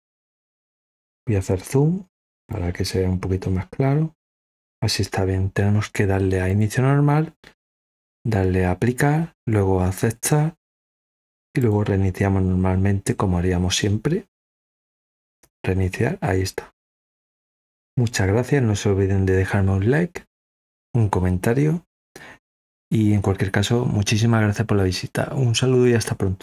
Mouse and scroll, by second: 0.4 click, 0.4 right click, 0.6-2.1 drag, 2.4-4.1 drag, 11.5 click, 14.2 click.